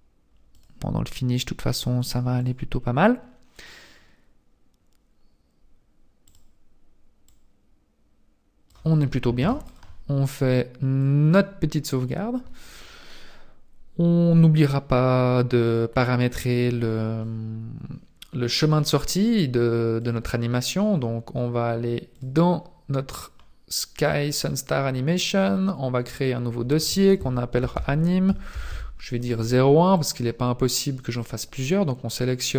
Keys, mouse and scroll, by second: 0.5 click, 1.7 click, 2.4 click, 6.3 click, 8.7 click, 9.4 ctrl+s, 11.0 click, 11.1 ctrl+s, 11.7-12.6 scroll down 1, 12.6 scroll down 1, 15.1-16.9 scroll down 9, 16.9-18.1 scroll down 8, 18.1-20.0 scroll up 5, 20.0 click, 20.0 scroll up 2.